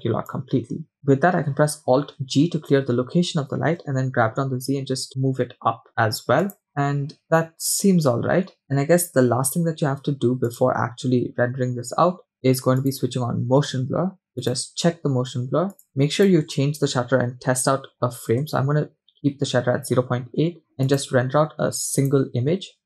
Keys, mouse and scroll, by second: 2.3 alt+g, 3.8 g, 6.7 scroll up 2, 7.6-7.9 scroll down 2, 8.1 scroll up 2, 8.6-9.4 shift+middle drag, 8.6 scroll down 3, 10.7 click, 11.2-12.1 scroll up 1, 12.8 click, 13.9-14.4 scroll down 2, 14.6 drag, 15.7 click, 16.2-18.5 drag, 20.9-22.8 drag.